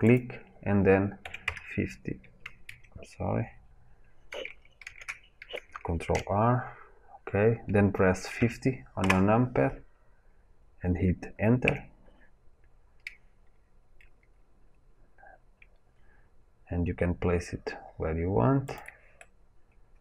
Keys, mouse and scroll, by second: 4.8 ctrl+z, 5.9 ctrl+r, 19.1 middle click.